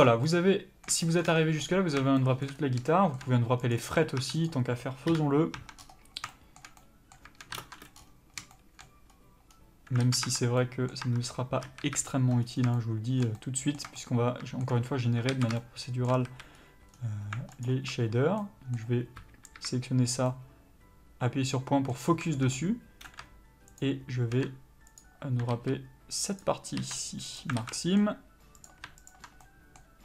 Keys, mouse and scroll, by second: 1.2 scroll up 1, 2.5 scroll up 1, 3.7 click, 3.9 Tab, 4.4 click, 5.0 KP_Divide, 5.5 Tab, 5.7 scroll up 1, 6.3-7.6 shift+middle drag, 7.6 ctrl+space, 7.9-8.3 scroll up 1, 8.3 scroll down 1, 8.5 shift+middle click, 9.1-9.5 scroll up 1, 9.5-9.9 scroll down 1, 9.9 alt+a, 10.3 Tab, 10.5 middle click, 11.0 Tab, 11.6 a, 11.7 KP_Decimal, 12.4-12.7 scroll up 1, 12.7 shift+middle click, 13.3 middle click, 13.8 scroll up 1, 13.9 shift+middle click, 14.8-15.3 scroll up 1, 15.3 alt+a, 15.5 shift+middle click, 16.2 a, 16.5-16.9 scroll up 1, 16.9-17.4 scroll down 1, 17.6 alt+click, 18.4 middle click, 19.5 KP_Decimal, 20.2 middle click, 23.7 shift+click, 24.9 ctrl+click, 25.5 ctrl+z, 26.3 ctrl+click, 27.3 ctrl+e, 27.5 alt+a, 27.7 middle click, 28.5 click, 29.0 ctrl+click, 29.4 middle click.